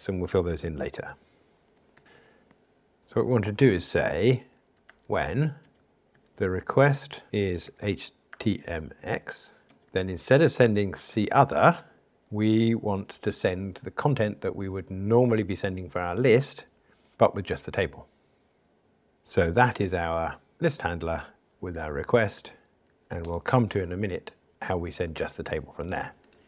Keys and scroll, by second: 3.0 super+z, 20.7 Return, 23.2 Escape.